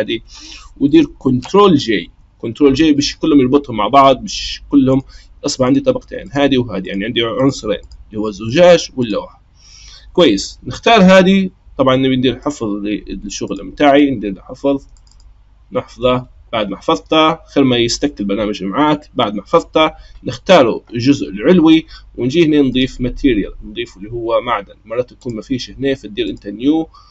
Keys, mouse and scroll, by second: 1.9 ctrl+j, 4.9 click, 5.6 click, 6.2 click, 6.8 click, 7.3 click, 7.8 click, 8.4 click, 9.0 click, 12.4-15.3 drag, 22.7 click, 25.2-27.1 drag.